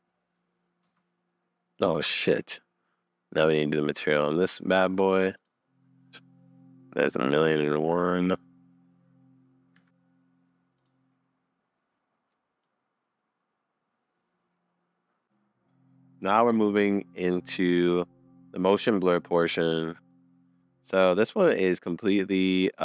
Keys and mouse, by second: 0.9 space, 2.5 super+s, 12.6 click, 14.9 middle click, 15.2 super+s, 18.8 click, 19.5 click.